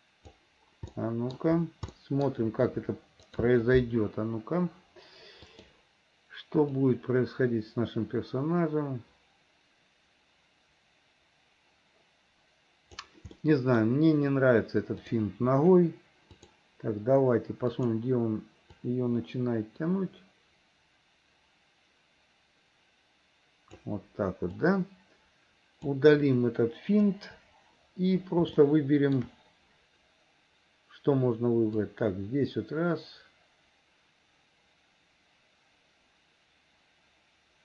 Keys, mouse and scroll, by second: 2.0 middle click, 3.5 click, 5.5 click, 7.0-13.1 drag, 13.4 middle click, 15.1 click, 16.3 click, 17.8 click, 18.9-23.9 drag, 24.5-25.9 drag, 27.1 Delete, 28.6 shift+middle click, 31.9-37.6 drag.